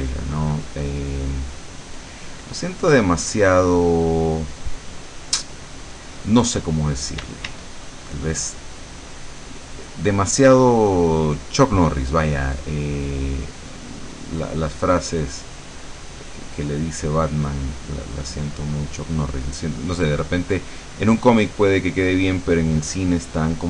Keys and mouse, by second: 1.6 middle click, 2.7-4.4 drag, 4.5 click, 5.7 middle click, 6.4 middle click, 7.3 d, 9.0 click, 9.9 click, 11.0-12.3 drag, 13.2 click, 13.5-15.8 middle drag, 17.7 click, 19.6-23.6 drag.